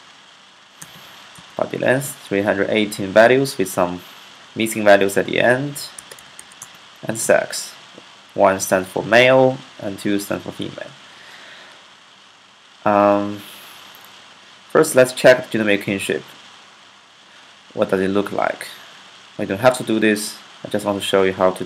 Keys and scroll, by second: 0.4-1.1 typing, 5.6-6.6 typing.